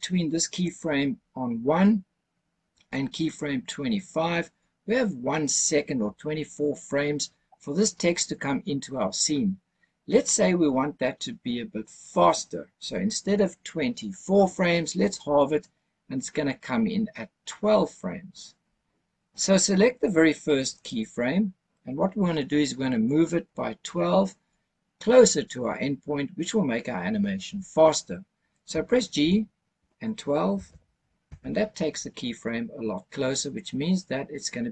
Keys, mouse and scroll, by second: 0.4 click, 3.1 click, 20.7 click, 29.1 g, 30.4 KP_1, 30.6 KP_2, 31.2 KP_Enter.